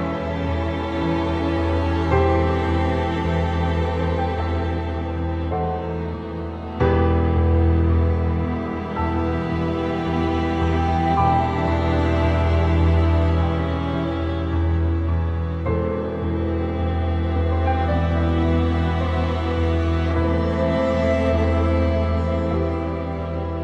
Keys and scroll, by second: 0.1 ctrl+z, 1.0 ctrl+z, 1.2 ctrl+z, 2.6 ctrl+z, 2.8 ctrl+z, 5.8 ctrl+s, 7.2 ctrl+z, 7.7 ctrl+z, 15.9 ctrl+z, 16.8 ctrl+z, 17.1 ctrl+z, 17.3 ctrl+z, 18.0 ctrl+z, 18.2 ctrl+z, 18.6 ctrl+z, 20.0 ctrl+e, 21.7 ctrl+t, 22.0 ctrl+t.